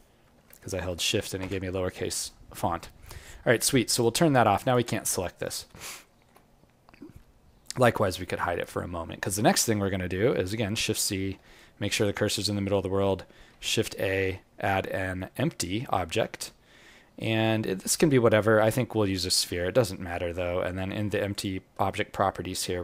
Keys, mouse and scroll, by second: 5.4-6.0 scroll up 5, 6.0 alt+middle click, 6.4-6.9 scroll down 1, 7.6 click, 7.6-8.3 scroll down 5, 8.3 scroll up 1, 9.7-10.3 scroll down 1, 10.3-10.6 scroll down 2, 10.7 shift+c, 11.5 alt+click, 13.5 shift+a, 21.3 click, 21.3-21.8 scroll down 1.